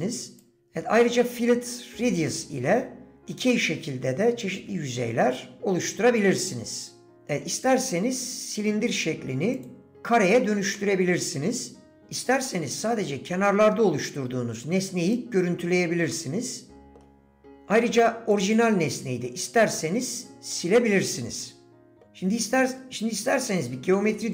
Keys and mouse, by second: 0.6-6.8 drag, 9.6 click, 10.9 middle click, 15.1 click, 16.3 middle click, 18.3 click, 19.8-22.0 middle drag.